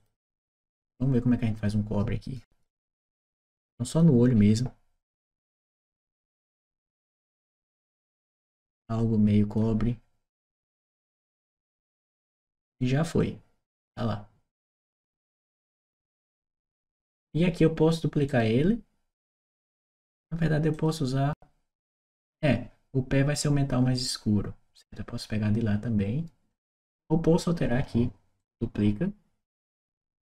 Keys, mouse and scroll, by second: 1.5 click, 3.2 click, 3.7 click, 5.0-6.5 drag, 7.2 click, 8.8 click, 11.0 click, 13.0-14.9 drag, 15.9 click, 18.1 right click, 20.5 click, 28.2 right click, 30.1 click.